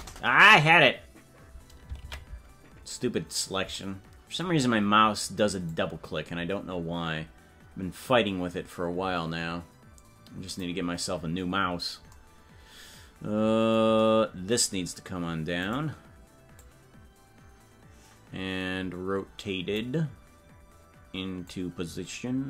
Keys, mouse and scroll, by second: 2.0 ctrl+z, 5.6-10.5 drag, 15.6 right click, 16.5-19.7 drag, 21.4-22.4 drag.